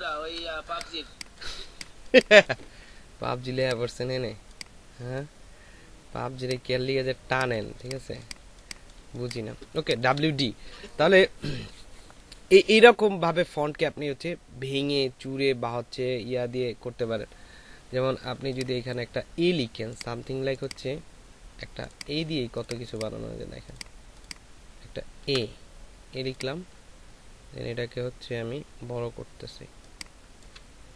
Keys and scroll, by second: 0.9 ctrl+alt+space, 1.8 ctrl+alt+space, 7.1 ctrl+space, 8.3 ctrl+space, 25.2 shift+a.